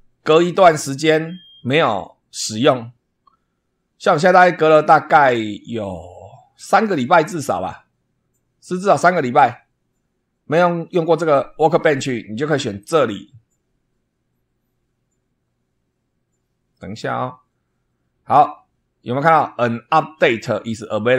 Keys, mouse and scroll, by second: 12.8 click.